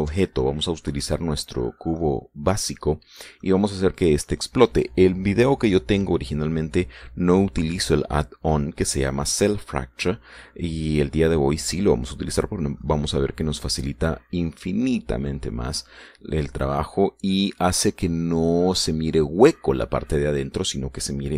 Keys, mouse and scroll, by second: 1.0-2.6 drag, 2.6 middle click, 2.7 scroll down 1, 2.9 middle click, 3.3 click, 11.8 scroll down 1, 12.2 click, 13.2-13.7 scroll up 1, 14.3-14.6 scroll down 1, 15.8-17.1 middle drag, 17.5-19.2 scroll down 2.